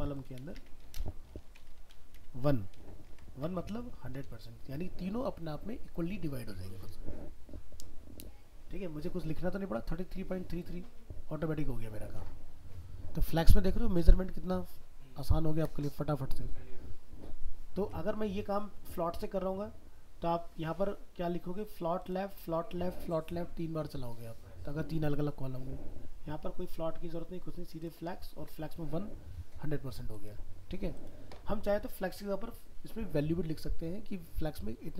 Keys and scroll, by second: 3.1 ctrl+s, 3.5 alt+Tab, 17.8 alt+Tab.